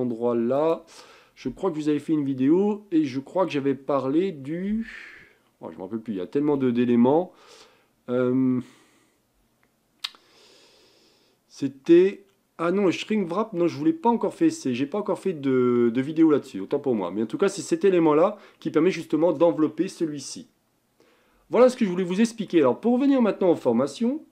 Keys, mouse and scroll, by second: 21.9-24.3 middle drag.